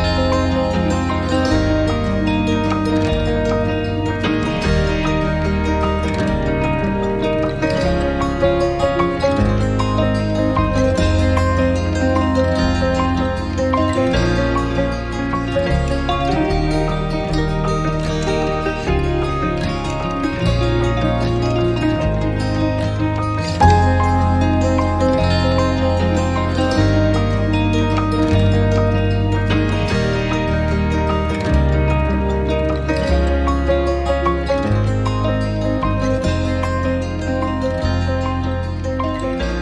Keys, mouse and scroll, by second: 25.7-26.1 scroll up 1, 26.1 alt+click, 29.0 scroll down 1, 29.4 alt+click, 29.9 alt+click, 30.2 alt+click, 30.4 alt+middle click, 31.1 alt+middle click, 32.4 alt+middle click, 32.4 click, 32.7 scroll down 1, 33.0 alt+click.